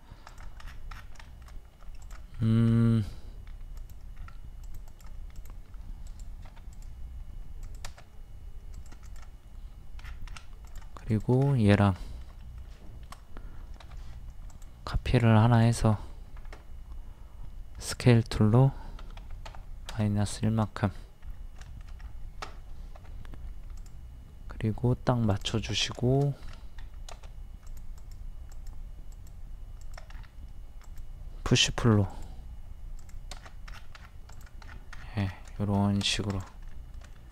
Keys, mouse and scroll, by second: 0.0-0.3 scroll up 1, 0.3 click, 0.7 scroll down 1, 1.3 shift+middle click, 2.0 click, 2.3-2.7 scroll up 1, 3.8 click, 4.2-4.6 scroll up 1, 4.6 click, 10.0 scroll down 1, 10.7 click, 11.1 shift+click, 11.4-11.7 scroll down 1, 12.0 shift+middle click, 12.9 shift+middle click, 14.5 ctrl+click, 17.8 click, 19.2 KP_1, 20.4 shift+middle click, 21.0 scroll up 1, 21.6 shift+middle click, 22.0-22.6 scroll up 1, 23.8 click, 26.5-26.8 scroll up 1, 27.7 click, 30.1 scroll up 1, 30.8-32.0 drag, 32.0 p, 32.1 click, 33.4 scroll down 1, 34.3 click, 34.7-35.0 scroll down 1, 35.6 shift+middle click, 36.2 scroll up 1, 36.3 click, 36.7 middle click, 37.1 shift+middle click.